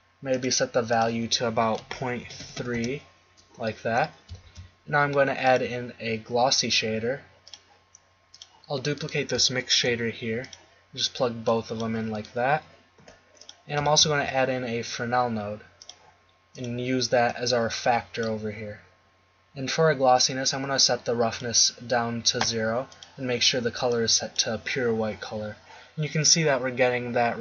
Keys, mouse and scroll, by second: 2.4 3, 2.6 3, 4.7 shift+a, 8.4 click, 9.7 shift+d, 13.2 g, 14.0 shift+a, 20.2-24.9 drag.